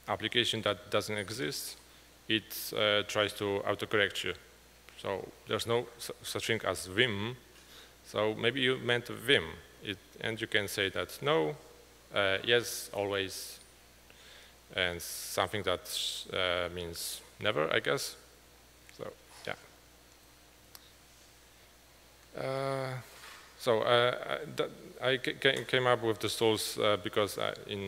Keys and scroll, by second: 1.4 Return.